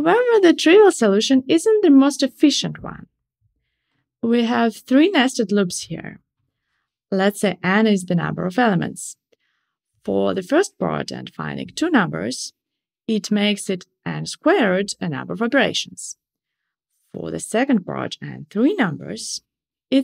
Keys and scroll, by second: 3.3 Escape, 3.4 alt+Up.